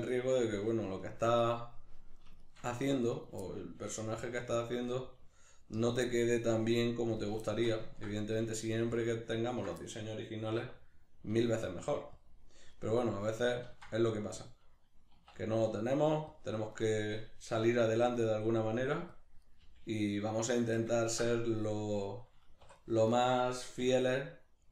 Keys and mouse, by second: 0.3 right click, 1.0 ctrl+right click, 1.5 middle click, 2.4 shift+right click, 2.7 middle click, 3.1 right click, 3.5-4.7 middle drag, 3.9 g, 4.7 click, 4.9 right click, 5.0 g, 5.9 click, 6.0 middle click, 6.5 right click, 6.7 g, 7.3 click, 7.5 shift+middle click, 8.2 right click, 8.4 g, 9.0 click, 9.5 ctrl+right click, 9.8-12.3 middle drag, 10.5 e, 12.3 click, 12.7 right click, 13.7 ctrl+z, 16.4 click, 16.7 right click, 17.7 g, 18.1 click, 18.6 right click, 18.8 g, 19.2 click, 19.4 right click, 19.6 g, 20.7 click, 20.9-22.7 ctrl+middle drag, 22.6 2, 22.7 right click, 23.1 shift+right click, 24.3 right click.